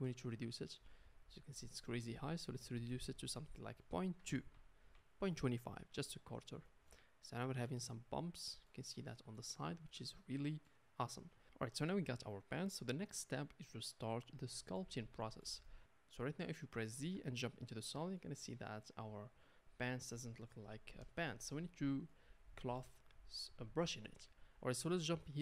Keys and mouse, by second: 0.0 ctrl+space, 0.0-25.4 ctrl+drag, 11.7-14.3 middle drag, 15.8 z, 17.0 z.